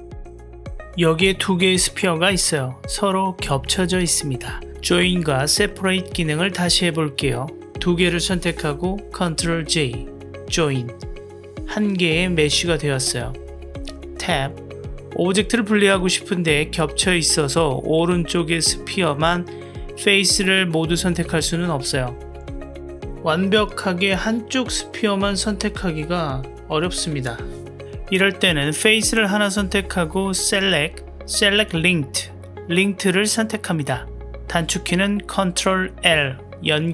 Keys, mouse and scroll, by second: 0.0 click, 3.8 click, 4.5 click, 8.2 click, 9.5 ctrl+j, 11.2-12.7 drag, 12.5 middle drag, 12.7 middle click, 13.4 middle click, 14.2 Tab, 15.2-16.1 middle drag, 18.1-19.3 drag, 19.4 click, 20.5 click, 21.9 middle click, 23.1 click, 23.8-24.8 middle drag, 25.1 click, 25.9-26.3 drag, 26.5-27.4 middle drag, 28.9 click, 30.3-34.2 drag, 36.4-36.9 middle drag.